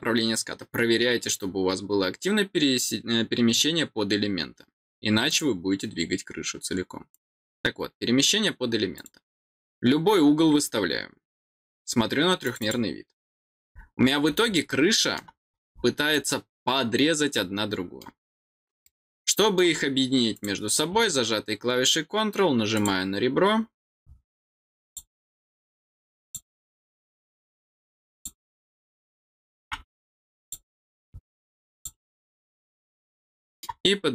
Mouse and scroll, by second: 8.9 click, 12.4 click, 13.7-14.3 scroll down 3, 14.5 middle click, 15.7 middle click, 16.1-18.0 middle drag, 18.8 middle click, 20.3 click, 22.7 click, 24.8 click, 26.2 click, 28.1 click, 30.4 click, 31.7 click, 33.1 middle click.